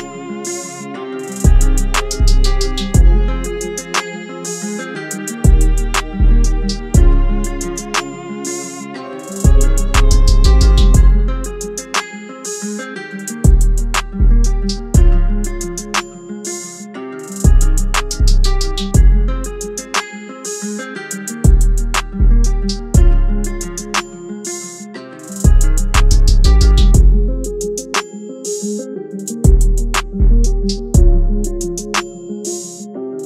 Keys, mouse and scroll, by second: 0.3 alt+shift+click, 5.3 alt+shift+click, 8.5 Return, 30.3 ctrl+t, 31.6 alt+shift+click.